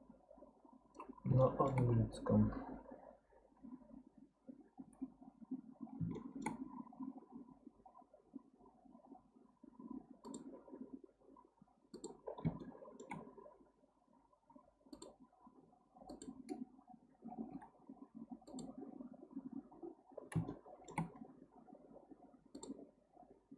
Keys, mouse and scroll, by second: 1.1-1.4 scroll up 1, 1.4 shift+middle click, 1.9-2.9 scroll up 2, 4.8 k, 5.6-6.2 scroll up 1, 6.2 shift+middle click, 6.7 scroll up 1, 12.3-12.6 scroll down 3, 12.6-15.7 shift+middle drag, 20.2 scroll down 2, 20.5-23.5 shift+middle drag.